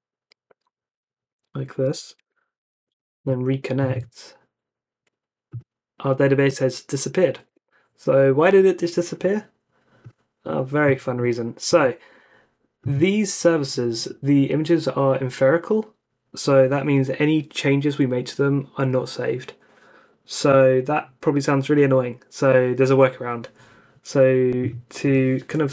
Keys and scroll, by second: 2.1 super+Tab, 7.4 Escape, 25.0 Escape.